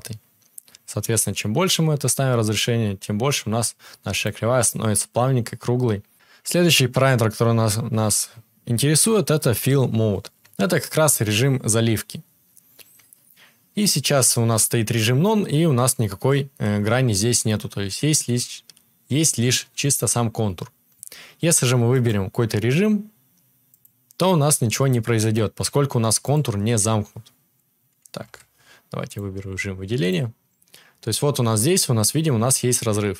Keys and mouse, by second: 28.2 ctrl+z, 30.1-31.2 middle drag, 31.2-33.1 drag.